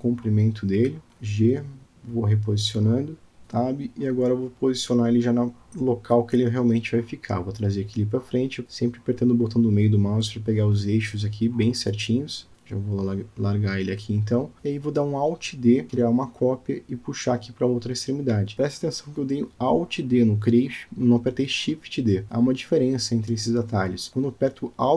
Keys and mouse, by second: 2.6 g, 4.6 Tab, 5.7-6.3 middle drag, 6.7 shift+middle click, 7.4 g, 13.1 g, 14.7 click, 14.9 click, 15.6 alt+d, 21.5 click, 21.8-23.7 middle drag, 24.2 click, 24.8 g.